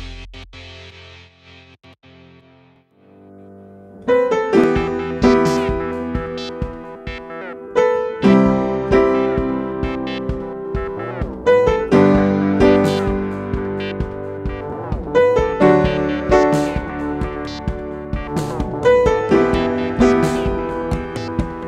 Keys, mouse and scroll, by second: 0.3 right click, 2.7 click, 4.1-4.7 alt+scroll up 1, 5.8 click, 12.4-12.9 scroll down 1, 13.1 space, 13.4-16.1 drag, 16.1 alt+scroll down 1, 17.9-20.3 drag, 20.3-21.0 scroll up 1, 21.2 alt+scroll down 1.